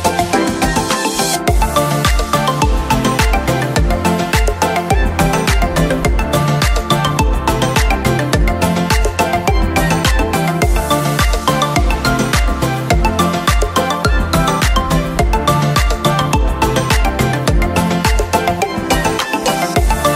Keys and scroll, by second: 15.5 ctrl+q, 16.2 ctrl+-, 17.7 ctrl+".